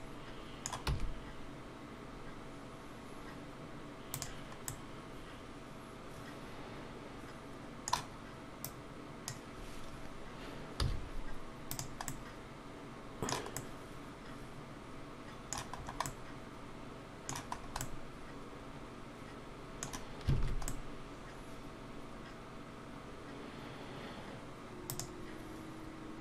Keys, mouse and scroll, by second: 0.8 e, 4.7 middle click, 8.6 click, 10.8 z, 12.1 middle click, 15.8-16.2 scroll up 2, 16.0 middle click, 17.5 scroll up 2, 17.8 middle click, 20.4 alt+a, 20.7 middle click, 24.3 Tab, 24.3 middle click, 24.3 scroll down 2, 24.9 click.